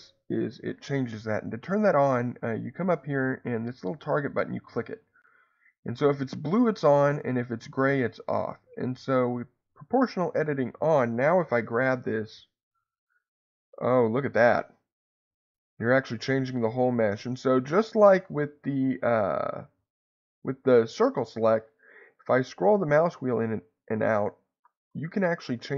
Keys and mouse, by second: 4.2 click, 6.7 click, 8.3 click.